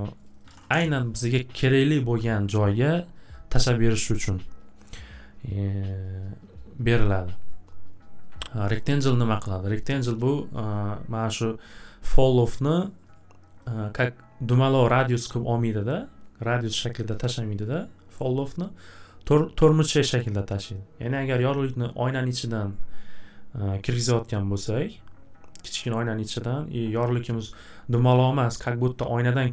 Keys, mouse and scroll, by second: 0.0-0.9 typing, 0.2 click, 0.4 click, 8.7 click, 13.6 click, 14.4 click.